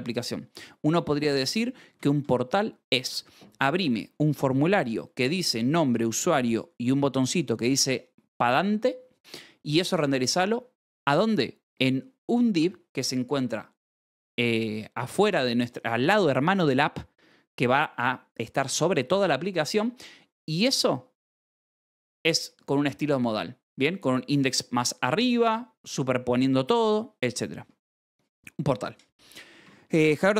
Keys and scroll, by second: 1.9 shift+v, 2.1 Escape, 27.5 Escape, 29.5 shift+v, 30.0 Escape.